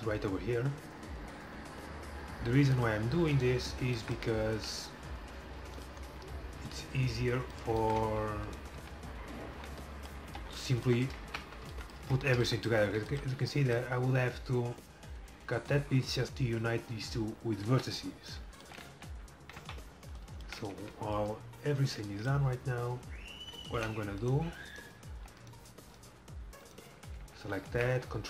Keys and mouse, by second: 3.4 right click, 4.0-5.5 middle drag, 4.7 e, 6.7 e, 8.8 f, 10.4 z, 11.4 Tab, 12.2 a, 17.7 KP_7, 18.9 z, 19.7 Tab, 20.3-21.5 drag, 24.3-28.2 right drag, 27.0 f, 27.5 a, 27.8 a.